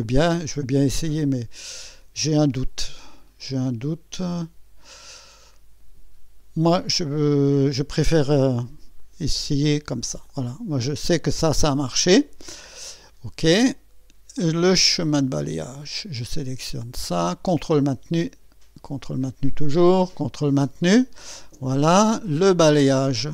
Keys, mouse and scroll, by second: 9.0 click, 10.2 click, 11.6 click, 15.0 click, 16.8 click, 17.9 ctrl+click, 19.5 ctrl+click, 21.0 ctrl+click, 22.6 click.